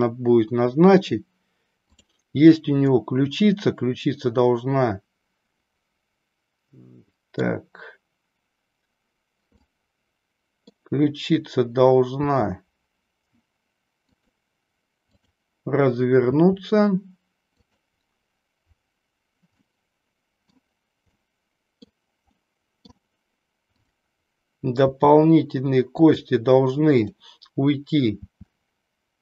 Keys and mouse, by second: 2.9-7.4 middle drag, 9.7-10.8 middle drag, 12.3 r, 16.3 r, 19.7-20.5 middle drag, 21.2 middle click, 22.4 middle click, 23.7 click, 24.8 r, 26.9 click, 28.0 r.